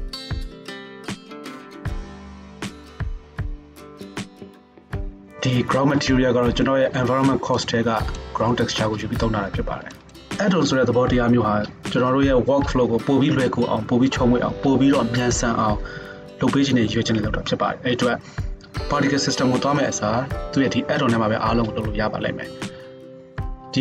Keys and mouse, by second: 3.2 z.